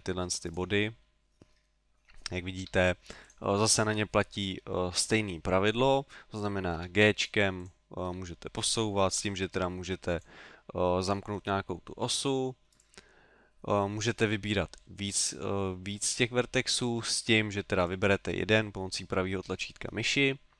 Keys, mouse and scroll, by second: 1.0 middle click, 2.7 g, 3.3 click, 6.8 g, 7.6 click, 8.1 g, 10.2 click, 11.3 middle click, 12.8 right click, 17.8 right click.